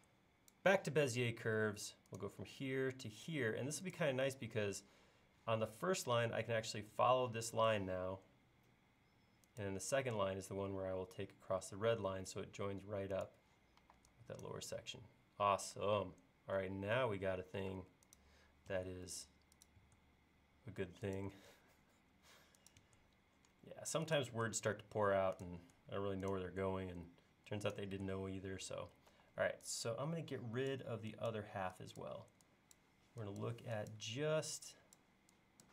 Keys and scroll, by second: 13.8 e, 17.7 space, 18.8 BackSpace, 19.8 BackSpace, 21.4 BackSpace, 22.8 BackSpace, 24.4 BackSpace, 25.7 BackSpace, 28.0 BackSpace, 29.2 e.